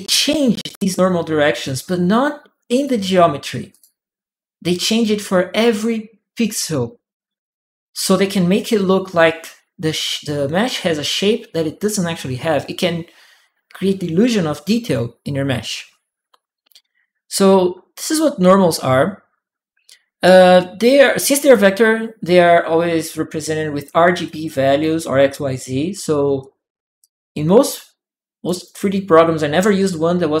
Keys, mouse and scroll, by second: 1.4 click, 2.5 click, 3.5 click, 23.2 click, 24.0 click, 26.2-28.2 right drag, 26.8 click, 30.3 right click.